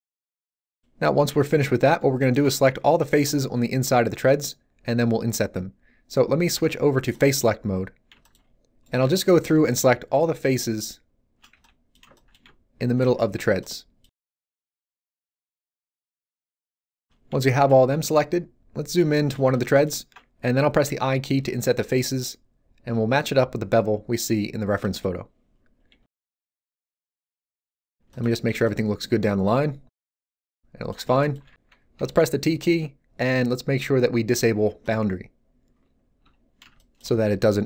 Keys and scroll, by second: 2.9 z, 11.5 b, 20.8 i, 31.9 t, 36.2 t.